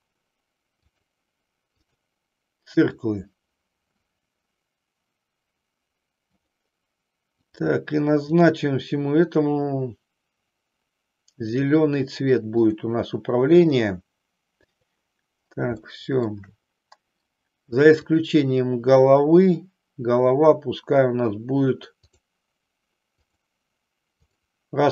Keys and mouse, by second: 0.9-2.0 drag, 2.8 click, 6.4 click, 7.4 click, 8.4 click, 11.4 click, 12.7-13.8 drag, 14.7 click, 15.8 shift+middle click, 18.0 click, 23.3 click, 24.3 click.